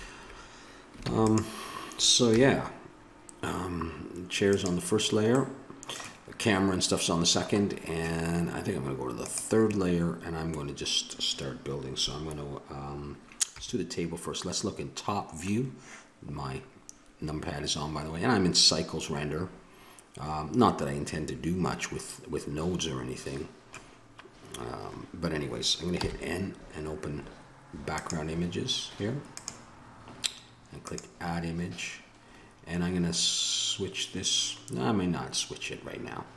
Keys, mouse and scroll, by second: 0.0 shift+z, 1.0 ctrl+s, 2.3 KP_0, 5.3-12.9 middle drag, 13.5 KP_7, 22.8-26.0 middle drag, 26.0 n, 27.9-32.6 drag, 36.3 click.